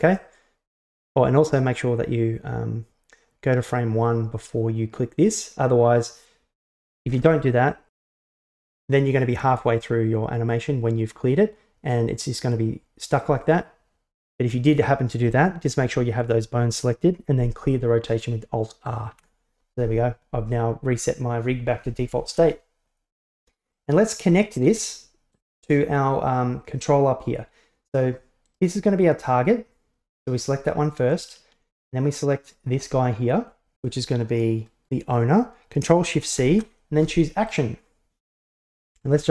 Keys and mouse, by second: 0.2-1.6 drag, 5.3 click, 7.3 ctrl+z, 8.0 click, 9.4 click, 12.0-13.1 drag, 19.2 alt+r, 23.3-23.8 middle drag, 24.3 shift+middle click, 25.4 right click, 28.5 right click, 32.5 shift+right click, 36.3 ctrl+shift+c.